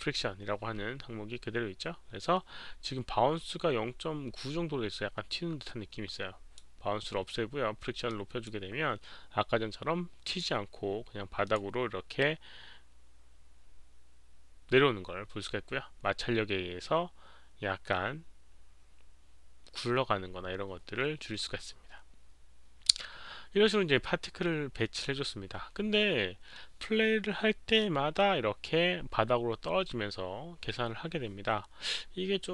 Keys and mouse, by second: 6.1-6.5 drag, 8.0-8.4 drag, 10.2 click, 11.4 click, 16.2 click.